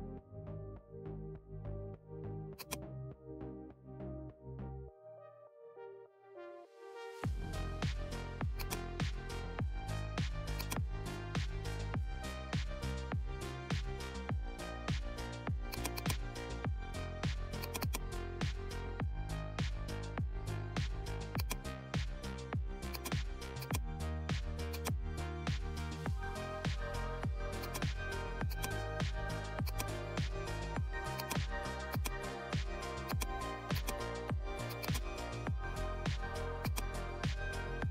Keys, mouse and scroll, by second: 2.5-6.1 drag, 6.1 Return, 8.5 click, 10.5-15.6 alt+drag, 15.6-22.8 drag, 23.8-27.4 drag, 27.6-34.6 drag, 36.6 click.